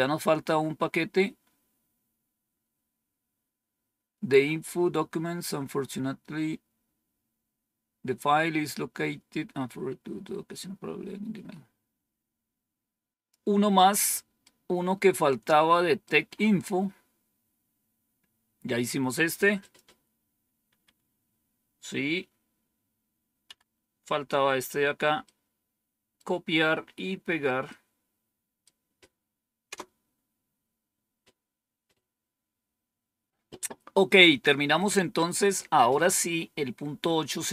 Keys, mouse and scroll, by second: 0.0-0.8 scroll up 1, 0.8-1.9 scroll up 1, 1.9-2.6 scroll down 1, 13.1 click, 14.3-16.0 right drag, 16.5 scroll up 1, 19.5 click, 20.6 Home, 23.3 End, 24.1-24.9 scroll down 1, 25.1-26.1 right drag, 27.6-28.6 right drag, 29.6 Return.